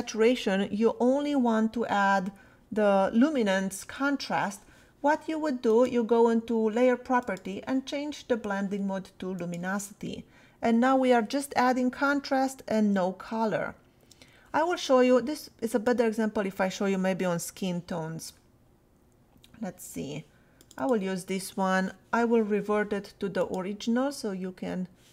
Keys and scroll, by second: 12.1 \, 13.7 \.